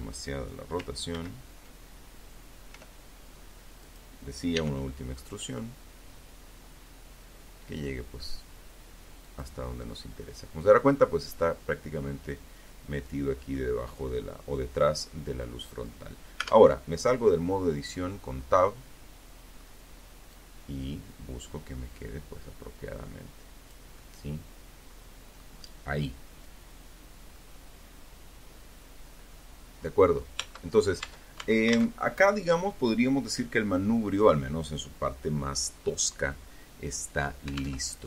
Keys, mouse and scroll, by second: 0.9 r, 2.0 click, 2.7 e, 7.4 click, 7.8-9.3 middle drag, 11.7-14.1 middle drag, 14.5 Tab, 16.5-17.9 drag, 18.5-22.0 drag, 22.1-27.1 drag, 27.3-27.7 scroll up 1, 27.9-28.3 scroll down 1, 28.6 Tab, 35.9 alt+Tab, 36.9-38.0 middle drag.